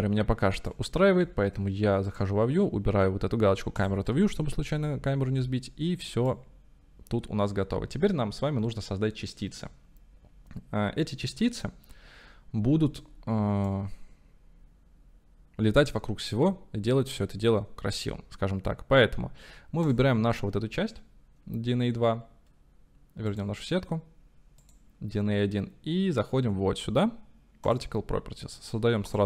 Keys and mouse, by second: 1.2 ctrl+s, 4.8-5.5 drag, 6.3-15.2 drag, 19.9-23.4 drag, 24.7-27.8 drag.